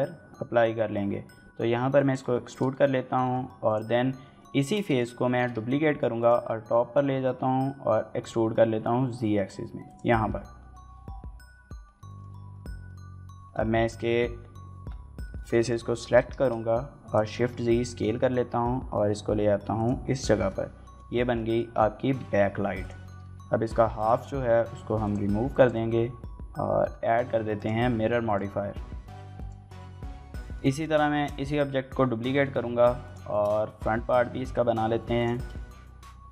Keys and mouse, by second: 1.8 click, 2.3 shift+middle click, 2.5 middle click, 3.0 shift+middle click, 3.5 click, 4.4 shift+middle click, 4.7 click, 5.1 shift+d, 5.3 z, 6.0 click, 7.1 e, 7.3 z, 8.4 z, 9.7 click, 10.2 KP_1, 10.5 KP_Decimal, 11.9 shift+middle click, 13.3 middle click, 15.2 shift+middle click, 15.4 middle click, 15.8 s, 16.1 shift+z, 16.9 click, 17.3 KP_7, 18.1 g, 19.6 click, 20.3 middle click, 20.9 shift+click, 21.1 middle click, 21.4-22.4 typing, 21.7 click, 22.2 click, 22.6 click, 22.8 Tab, 22.9 middle click, 23.3 shift+middle click, 23.4 middle click, 23.7 Tab, 23.9 3, 24.1 alt+click, 24.5 z, 24.9 click, 25.3 click, 25.6 x, 26.2 Tab, 26.3 z, 26.9 click, 29.2 click, 29.6 shift+middle click, 29.7 middle click, 30.0 shift+middle click, 30.3 shift+middle click, 30.5 middle click, 30.9 shift+d, 31.8 y, 32.3 x, 32.8 click, 33.1 shift+middle click, 33.4 middle click, 33.7 g, 34.1 x, 35.0 click, 35.2 shift+middle click, 35.4 Tab.